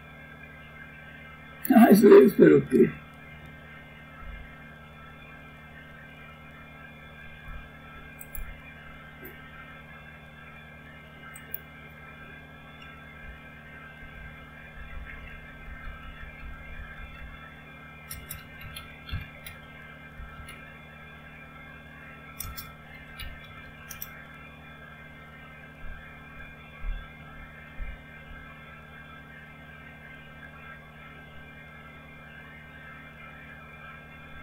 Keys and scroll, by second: 13.2-20.8 typing, 22.3-24.1 typing.